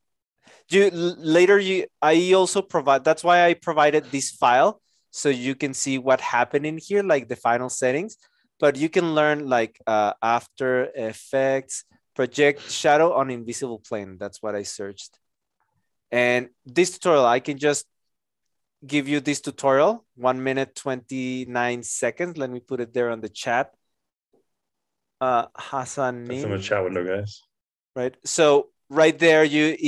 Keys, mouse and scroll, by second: 9.9-12.2 typing, 21.4 ctrl+c, 23.0 ctrl+v, 23.8 Return.